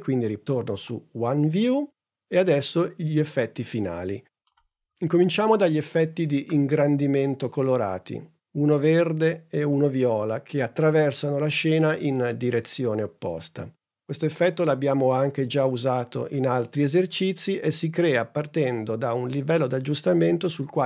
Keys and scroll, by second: 4.5 super+Tab.